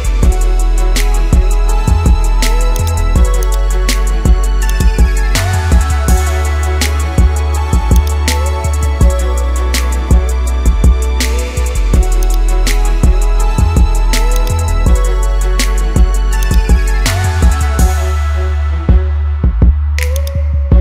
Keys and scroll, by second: 6.3 ctrl+-, 12.9 ctrl+-, 15.7 ctrl+z.